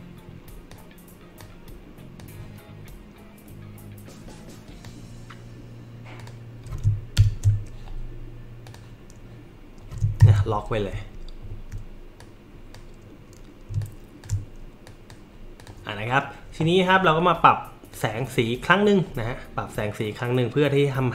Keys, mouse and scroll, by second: 0.7-1.4 drag, 2.2-4.8 drag, 6.2 click, 7.2 ctrl+shift+[, 8.6 click, 10.2 ctrl+KP_2, 11.1 alt+middle click, 11.1 alt+scroll up 2, 11.5 alt+middle click, 12.2-12.7 drag, 13.8 alt+shift+click, 14.9 click, 15.6 click, 17.9 click.